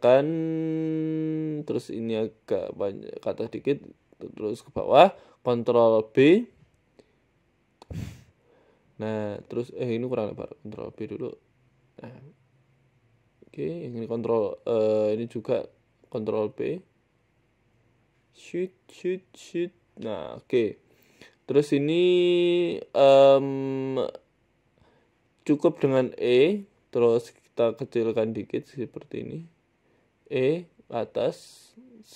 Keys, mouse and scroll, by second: 0.5 Tab, 0.8 click, 1.1 s, 1.7 click, 2.3 g, 3.1 click, 3.7 e, 4.4 s, 5.1 click, 5.7 ctrl+b, 9.3 s, 10.0 ctrl+b, 13.7 click, 14.5 g, 15.3 s, 16.1 g, 17.3 ctrl+v, 17.8 ctrl+b, 20.3 Tab, 20.7 shift+middle click, 21.0 Tab, 21.4 click, 22.0 shift+middle click, 22.4 scroll up 1, 22.7 shift+middle click, 23.6-24.1 scroll down 3, 24.4-24.8 scroll down 2, 25.5 e, 26.6 shift+middle click, 27.0 e, 27.6 s, 29.4 s, 29.4 e, 30.6 shift+middle click, 30.9 e.